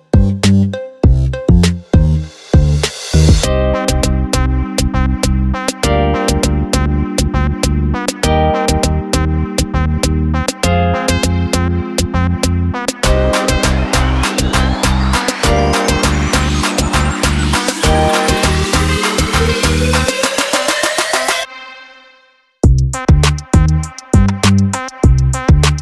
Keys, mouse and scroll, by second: 0.3-0.9 drag, 1.3 click, 1.9 click, 2.2 click, 2.6 click, 3.1 click, 3.3 click, 3.8 drag, 4.4-5.2 drag, 5.4-6.3 drag, 6.5 click, 7.9 click, 8.7 click, 9.4-10.6 drag, 10.9-14.6 drag, 15.6-17.2 drag, 17.4 click, 18.5-19.0 drag, 19.2-20.3 drag, 20.7 click.